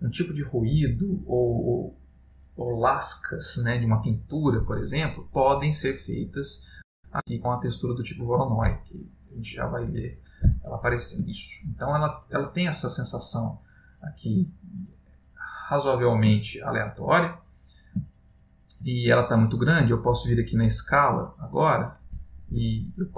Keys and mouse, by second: 5.8 click, 10.1 click, 10.8 middle click, 11.5 ctrl+middle click, 16.6 ctrl+middle click, 17.5 middle click, 18.3 ctrl+middle click, 20.7 click.